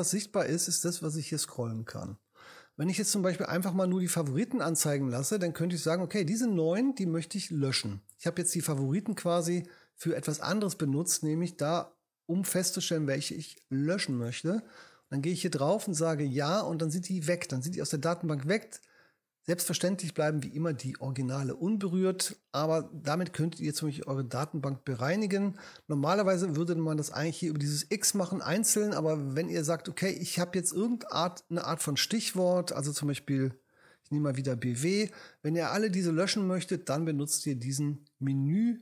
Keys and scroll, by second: 33.7 b, 34.0 w.